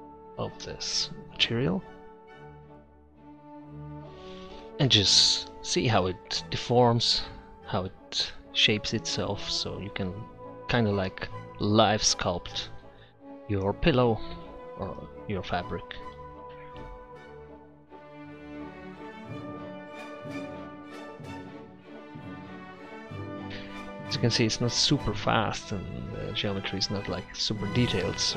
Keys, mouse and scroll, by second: 1.5 middle click, 2.7-8.8 middle drag, 12.3-14.1 middle drag, 17.7-19.8 middle drag.